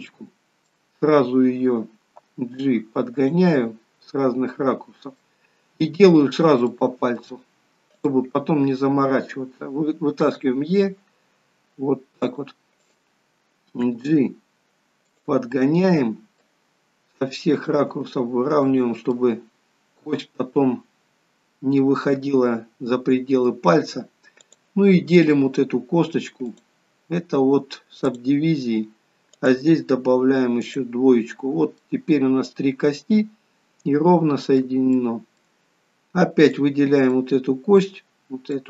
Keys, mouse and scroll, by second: 3.7 middle click, 5.5 scroll down 1, 5.7 scroll up 3, 6.9 shift+middle click, 8.2 click, 10.4 e, 13.1 click, 14.0 g, 15.8 middle click, 17.8 click, 18.1 g, 19.4 middle click, 24.7 click, 28.4 click, 30.9 click, 32.0 middle click, 35.2 middle click, 36.7 click, 37.4 middle click.